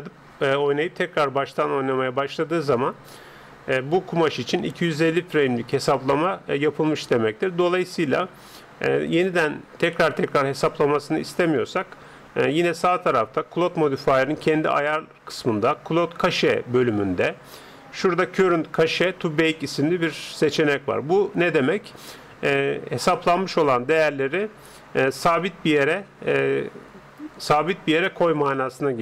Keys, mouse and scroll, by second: 9.2-10.8 drag.